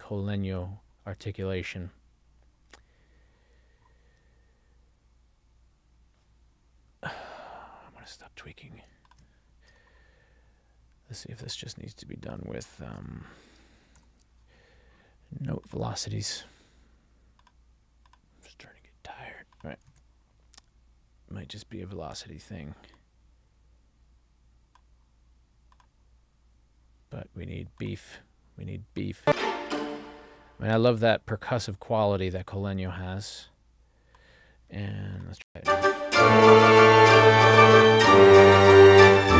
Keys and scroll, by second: 20.0 super+a, 35.6 space.